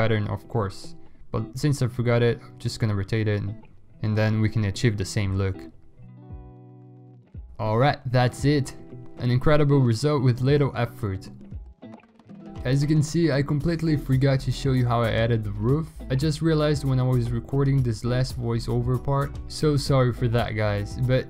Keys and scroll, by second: 0.8 ctrl+t.